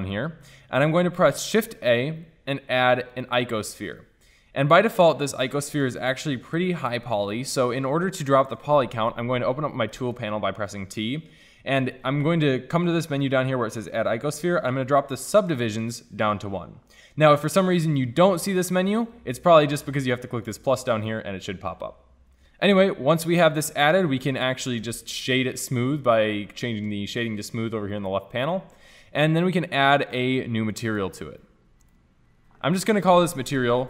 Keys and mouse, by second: 0.1-1.4 drag, 1.4 shift+a, 5.1-6.4 drag, 10.0 t, 16.0-22.7 drag, 22.7 t, 23.7 t, 28.0-33.8 drag.